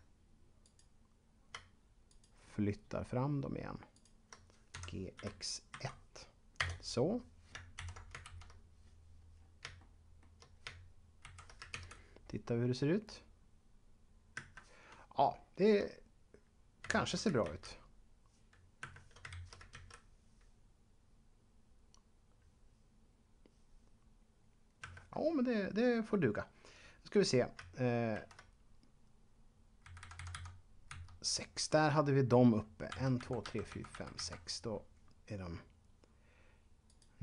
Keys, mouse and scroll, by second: 2.1 shift+right click, 4.5-6.2 typing, 6.6 Return, 7.8 ctrl+Up, 8.4 Left, 9.3-9.6 scroll down 1, 9.8 shift+middle click, 11.2 shift+Left, 13.4 a, 14.3 Escape, 16.9 shift+Left, 18.8 Escape, 19.4 Left, 24.8 Escape, 28.1 shift+Up, 29.8 Left, 29.9 Left, 32.9 Right, 33.2 Right, 36.9 right click.